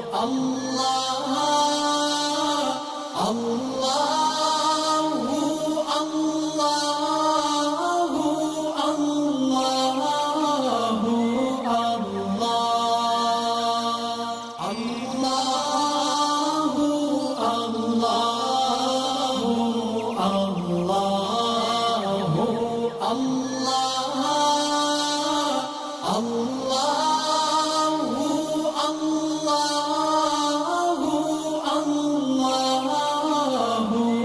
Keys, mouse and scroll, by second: 2.1 click, 2.2 alt+scroll down 1, 2.6 space, 2.7-4.7 drag, 5.9-6.3 alt+scroll up 1, 6.4 click, 6.8 alt+scroll up 1, 7.3 alt+scroll up 1, 8.4-9.2 alt+shift+click, 11.7 click, 15.1 click, 17.9 space, 18.2 click, 18.7 alt+scroll up 1, 19.3-20.4 drag, 22.1 ctrl+shift+[, 22.8 click, 23.5 ctrl+shift+[, 24.2 click, 26.0 space, 26.1 click, 26.9-27.4 click, 27.5-28.1 alt+scroll up 2, 29.0-30.5 alt+click, 30.7 click, 31.2 alt+scroll up 1, 31.6-32.3 drag.